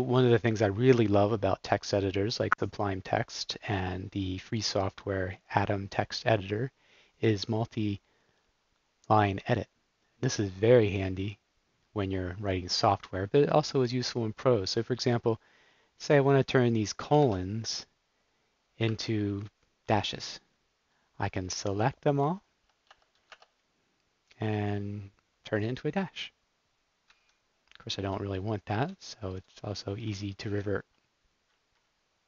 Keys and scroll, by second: 17.2 shift+Right, 19.4 super+d, 19.9 super+d, 20.2 super+d, 20.4 super+d, 21.2 super+d, 21.8 super+d, 22.1 super+d, 22.8 space, 27.0 Escape, 28.0 super+z, 28.7 super+z, 29.3 super+z, 30.4 ↺.